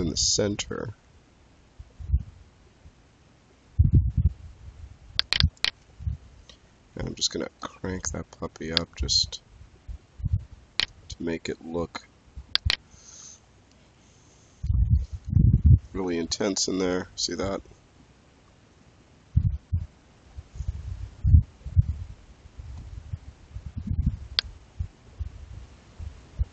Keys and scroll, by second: 6.8 5, 7.3 Return.